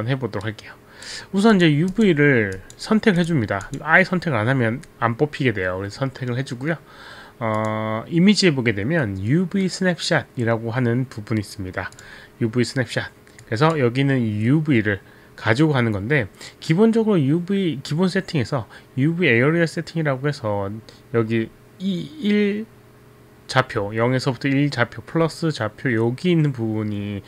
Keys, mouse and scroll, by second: 0.5 right click, 1.6 right click, 1.9 click, 2.7 click, 3.2 click, 3.7 click, 7.6 click, 12.0 click, 13.4 click.